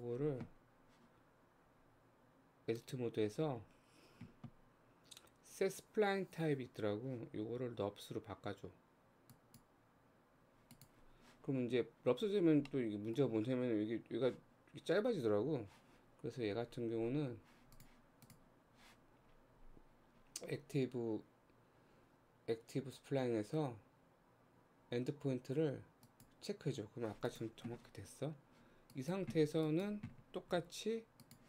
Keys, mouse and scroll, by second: 2.8-5.9 right drag, 10.7 click, 12.7-15.8 middle drag, 16.7-17.2 scroll down 6, 17.8 click, 18.3 click, 19.2-19.7 scroll down 6, 26.0 click, 27.3 click, 28.9 click, 29.7 click, 30.6 g.